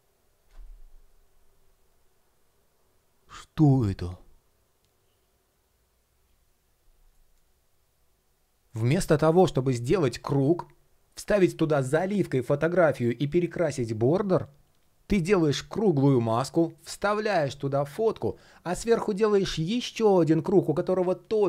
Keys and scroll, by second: 6.8 shift+щ, 8.3 shift+щ.